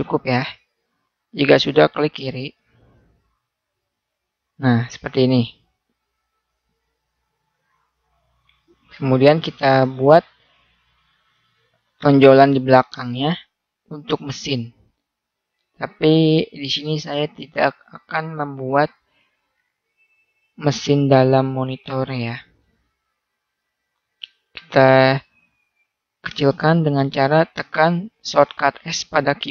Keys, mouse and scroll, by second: 2.6-3.7 drag, 6.9-9.0 middle drag, 9.4 click, 11.8 middle click, 14.1-15.8 drag, 17.0-18.3 middle drag, 21.6 middle click, 23.0 s, 23.2 middle click, 27.7 middle click, 29.1 s.